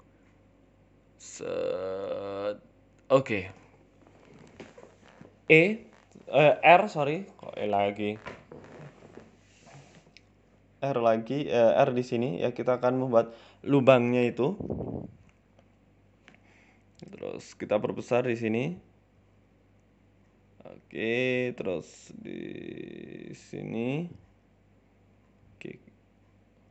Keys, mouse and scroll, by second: 13.2 middle click, 13.8 right click, 14.0 alt+shift+right click, 14.6 s, 15.0-15.6 scroll up 4, 15.3 right click, 15.6 right click, 15.8 alt+shift+right click, 16.0 alt+shift+right click, 16.4 KP_1, 17.0 s, 20.9 shift+middle click, 21.2 scroll, 21.5 shift+middle click, 21.5 scroll down 2, 22.1 middle click, 22.4 shift+middle click, 22.5 z, 23.0 middle click, 23.6-24.8 scroll down 12, 23.7 middle click, 23.9 Tab, 24.1 middle click, 24.8 middle click, 25.6 KP_1, 26.1 scroll up 6.